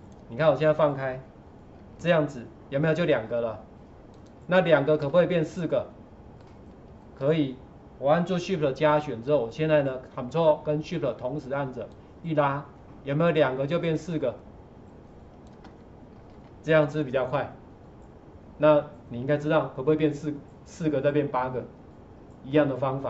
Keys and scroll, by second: 1.7 ctrl+4, 16.3 ctrl+shift+4.